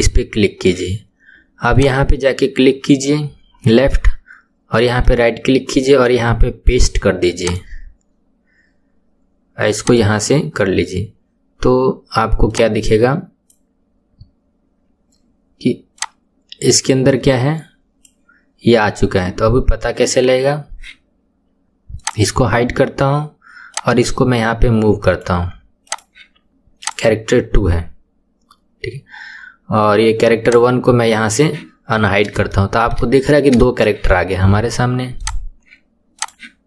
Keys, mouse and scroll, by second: 1.7 click, 5.0-8.1 right drag, 9.8 click, 12.5-15.5 drag, 16.0-19.1 drag, 22.0 click, 23.7 click, 25.9 click, 26.8 click, 30.5 click, 32.5-33.1 shift+middle drag, 33.1-33.6 scroll up 2, 33.6-35.3 shift+middle drag, 35.3 click, 36.1 click.